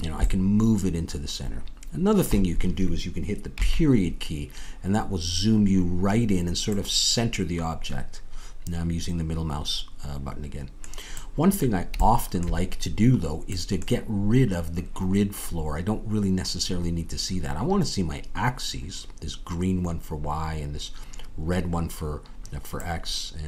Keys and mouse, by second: 3.5 KP_Decimal, 6.7-8.6 middle drag, 13.9-19.3 middle drag.